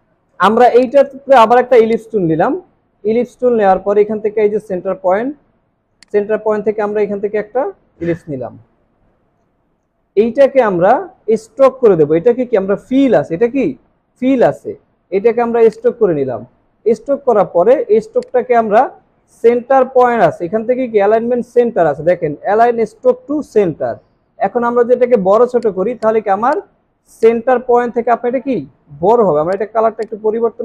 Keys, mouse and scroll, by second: 0.8 right click, 2.8 alt+scroll up 1, 26.0 double click, 30.0 double click.